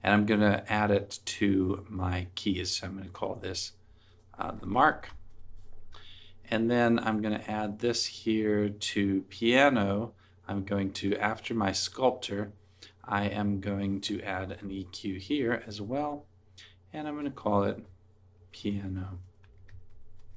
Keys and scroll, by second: 4.6-7.1 typing, 15.7-16.6 typing, 16.9 Return, 19.7-20.3 typing.